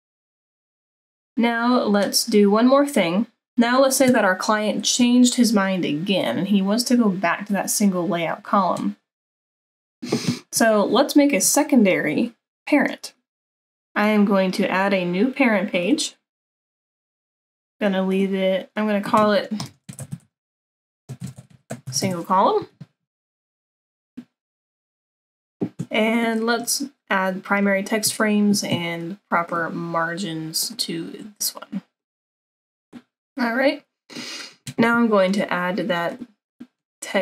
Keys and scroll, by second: 13.4 ctrl+z, 19.5-22.5 typing, 24.6 typing.